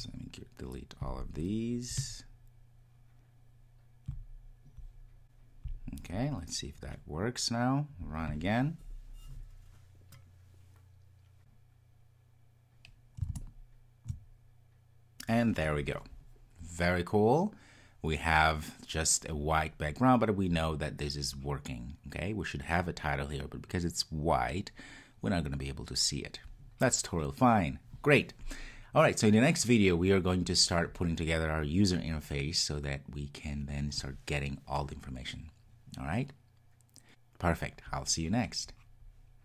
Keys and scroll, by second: 8.0 ctrl+r.